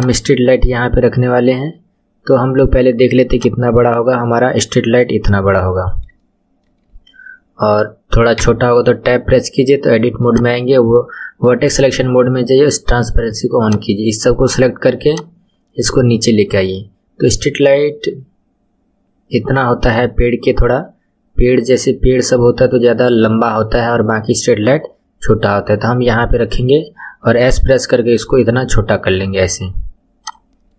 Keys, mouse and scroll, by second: 3.3 click, 6.1-8.3 shift+middle drag, 8.3 Tab, 10.3-13.3 drag, 15.1 click, 27.3 s, 30.5-30.7 scroll up 5.